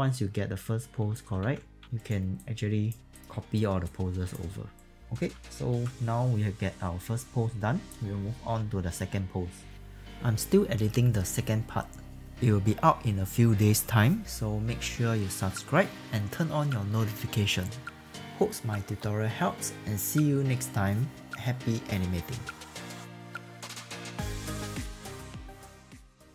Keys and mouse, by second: 0.1 click, 1.4 ctrl+z, 1.9 alt+right click, 2.4 alt+click, 3.1 alt+click, 3.9 alt+click, 4.7 alt+right click, 4.9 click, 5.7 ctrl+s.